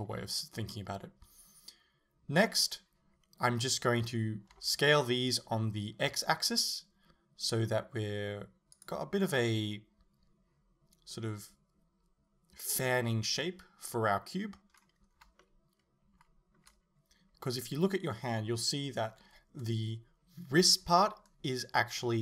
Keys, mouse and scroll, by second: 2.5-4.6 middle drag, 4.6 s, 8.6 middle click, 8.9 click, 14.8-15.4 scroll up 1, 15.4-22.2 shift+middle drag.